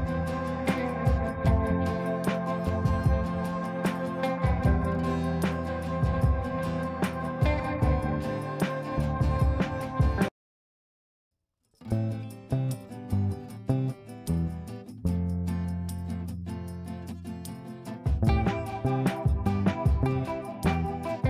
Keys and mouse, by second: 2.3 space, 3.3-4.0 drag, 5.3 ctrl+z, 6.5-9.5 drag, 9.3 space, 10.1 F2, 10.4 click, 12.9 click, 14.5 right click, 15.7-17.6 shift+drag, 19.8 F3.